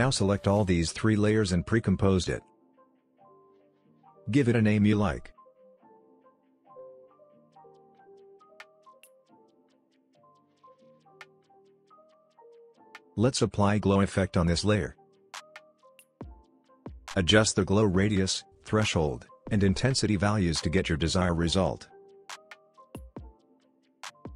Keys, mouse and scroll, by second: 0.0-0.8 click, 1.0 right click, 1.9 click, 5.5 right click, 5.9 click, 7.4-8.7 typing, 10.5-11.6 typing, 11.8 Return, 12.6 click, 14.7 ctrl+space, 15.1-16.2 typing, 18.8-20.4 drag, 21.9 scroll up 1, 22.5-23.9 scroll down 1, 23.9-24.3 drag.